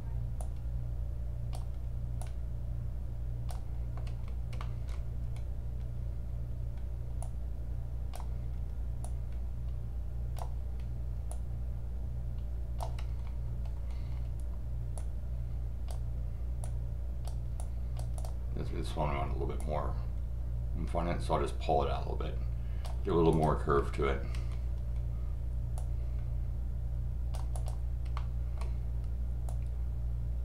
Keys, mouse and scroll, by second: 0.4-1.5 drag, 2.2-3.5 drag, 4.6 middle click, 5.2 scroll down 2, 7.2-8.1 drag, 9.0 click, 11.3 click, 14.1 scroll down 2, 14.9 click, 16.6 click, 17.6 click, 18.2 click, 19.6-22.8 drag, 23.3 click, 23.8 scroll up 2, 25.7 click, 27.5 click, 28.1 middle click, 28.5 scroll up 1, 29.5-30.4 drag.